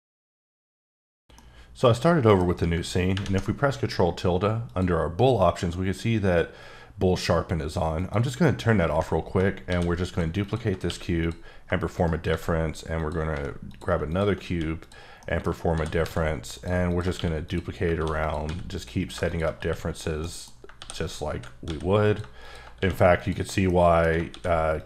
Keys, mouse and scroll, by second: 2.7 d, 3.3 d, 4.6 click, 7.9 click, 8.0 click, 9.7 shift+d, 10.0 click, 11.9 shift+right click, 12.3 shift+a, 13.0 click, 13.3 s, 13.7 click, 14.1 double click, 14.5 q, 14.8 click, 15.2 middle click, 15.7 shift+d, 16.0 z, 16.5 click, 17.2 q, 17.5 click, 17.9 shift+d, 18.2 click, 18.5 s, 18.7 click, 19.6 q, 19.9 click, 20.2 middle click, 20.8 shift+d, 21.0 click, 21.6 s, 22.0 click, 22.8 q, 23.2 click, 23.6 middle click, 24.3 shift+d, 24.7 click.